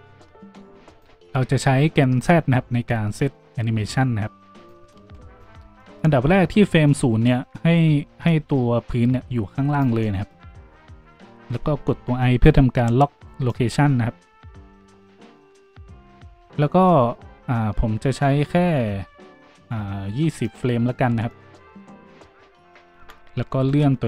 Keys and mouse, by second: 1.3 ctrl+z, 4.9 ctrl+z.